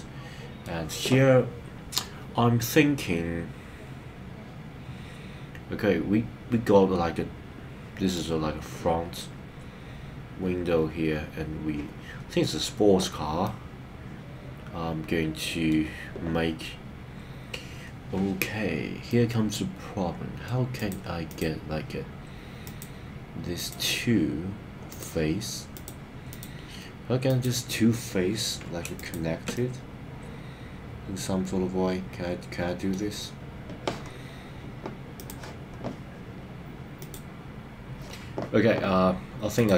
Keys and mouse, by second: 8.2-9.2 middle drag, 13.4-15.7 middle drag, 19.1-20.5 middle drag, 24.9 click, 27.3 click, 29.1 shift+click, 29.5-33.0 middle drag.